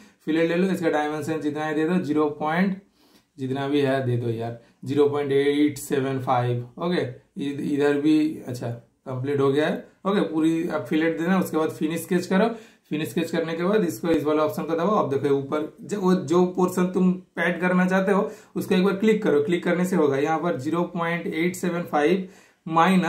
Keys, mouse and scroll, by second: 0.8 super+click, 3.0 super+Return, 4.0 super+right click, 5.1 super+click, 7.2 super+Return, 11.6 super+click, 11.6 typing, 13.9 super+click, 14.0 super+click, 15.7 super+click, 18.6 super+click.